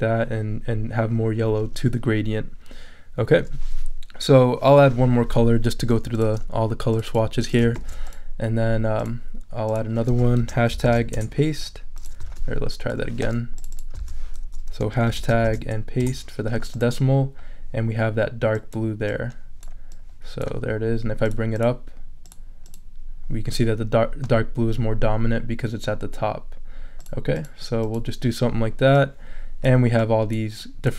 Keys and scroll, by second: 7.7 super+c, 10.4 shift+3, 10.8 shift+super+v, 11.1 super+Return, 12.0 Return, 12.3 super+a, 14.1 super+a, 14.4 super+BackSpace, 15.1 shift+3, 15.4 shift+super+v, 16.0 super+Return, 16.5 Return.